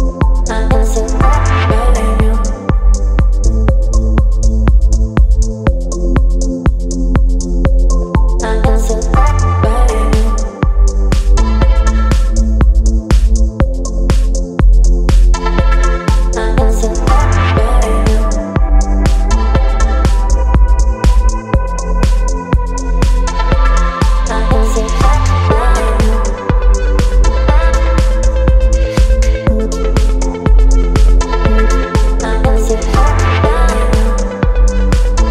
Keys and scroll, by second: 8.3 ctrl+t, 11.0 Return, 16.9 ctrl+t, 19.6 Return, 24.3 ctrl+g.